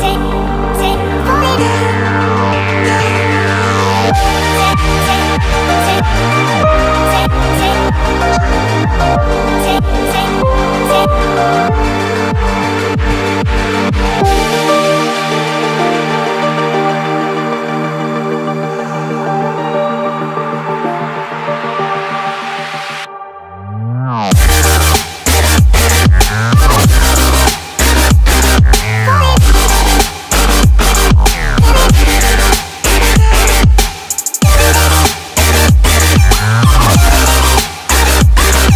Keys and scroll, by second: 35.8 Escape, 36.5 ctrl+x.